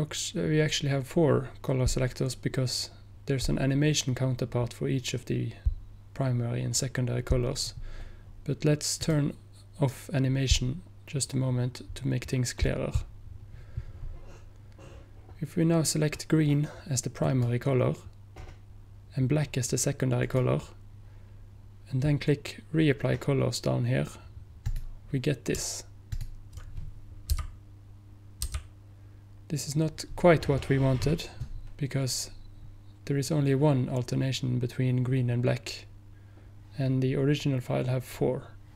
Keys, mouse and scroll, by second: 17.3 click, 18.2 click, 20.3 click, 24.7 click, 26.2 ctrl+click, 27.4 ctrl+p, 28.5 p.